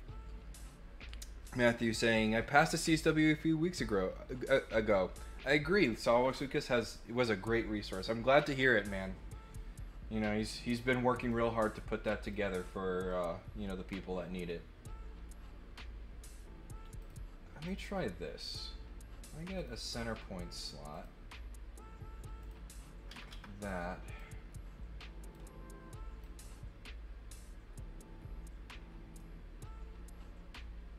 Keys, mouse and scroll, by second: 10.3 middle click, 11.2 click, 12.2 click, 13.1 middle click, 16.9 click, 17.6 click, 19.5 click, 20.9 click, 22.4 click, 24.1-25.3 drag, 26.2-30.9 drag.